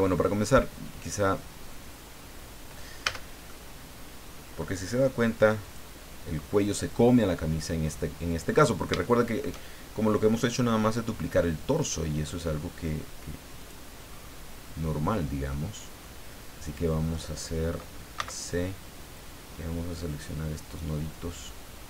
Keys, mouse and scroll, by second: 3.0 a, 3.4-4.7 middle drag, 5.6 click, 8.5-8.8 scroll up 2, 9.0 shift+middle click, 10.3-10.6 scroll up 2, 10.6-10.9 scroll down 2, 13.6 click, 14.1-14.5 scroll up 2, 16.0-17.3 middle drag, 18.2 c, 19.1-21.8 drag.